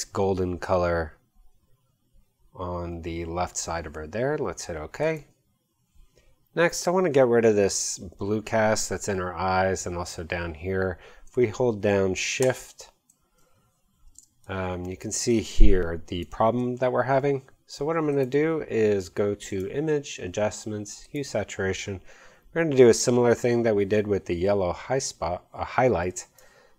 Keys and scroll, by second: 14.1 shift+space.